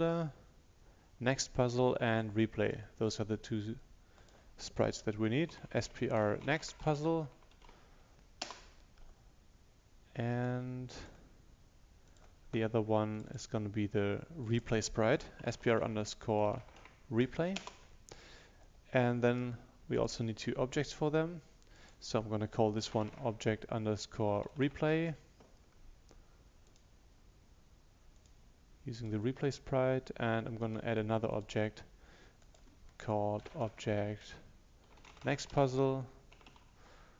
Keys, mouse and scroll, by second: 5.6-8.2 typing, 8.4 Return, 10.4 right click, 11.0-13.3 drag, 15.3-17.4 typing, 17.6 Return, 19.3 right click, 20.0 click, 22.7-25.4 typing, 26.7 click, 30.7 right click, 31.4 click, 33.4-37.1 typing.